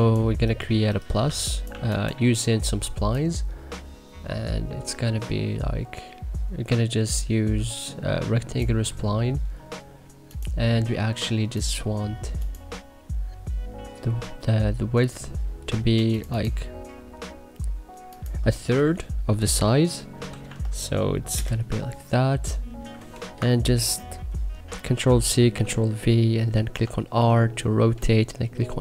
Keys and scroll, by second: 1.6 1, 20.0-20.9 typing, 21.3 Return, 24.9 ctrl+c, 25.3 ctrl+v, 26.7 r.